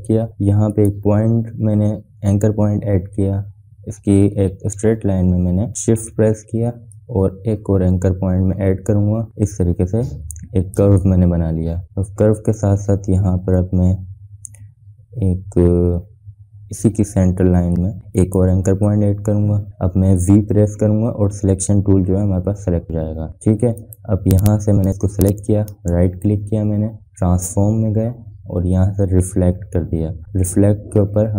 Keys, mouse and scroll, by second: 1.1 click, 6.6 click, 7.3-11.3 drag, 18.5 click, 22.6 v, 23.6 click, 24.4 click, 26.3 right click, 27.7 right click.